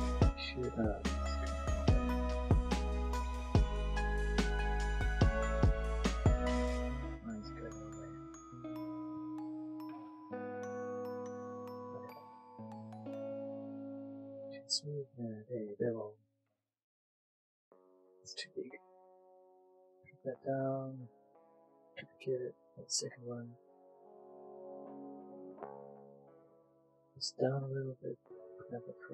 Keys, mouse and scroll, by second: 2.6 click, 3.6 middle click, 6.8 click, 7.2 scroll, 7.4 middle click, 9.7 middle click, 10.5 click, 11.0 middle click, 11.9 click, 12.7 middle click, 13.3 Tab, 13.3 middle click, 13.9 right click, 14.2 click, 15.9 middle click, 18.0 Tab, 18.4 middle click, 18.7 s, 19.2 click, 21.2 shift+d, 21.5 click, 22.0 click, 23.0 Tab, 23.2 click, 23.4 middle click, 24.0 Tab, 24.4 click, 26.5 click, 27.7 shift+middle click, 28.1 click.